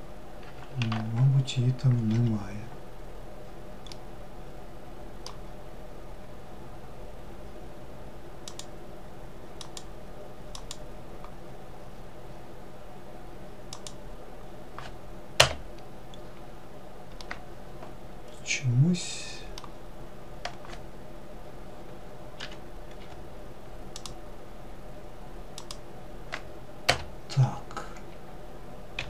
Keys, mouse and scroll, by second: 3.1-6.2 middle drag, 15.4-16.4 scroll up 4, 16.4-19.5 middle drag.